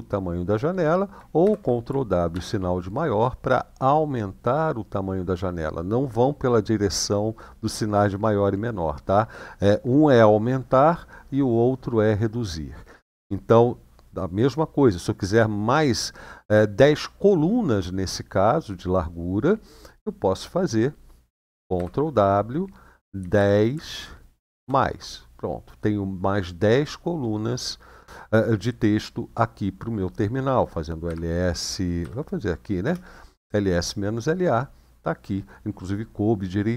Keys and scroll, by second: 1.2 ctrl+w, 2.1 shift+., 21.5 ctrl+w, 22.9 typing, 24.3 typing, 30.8 l, 31.8 Up, 32.6 Return.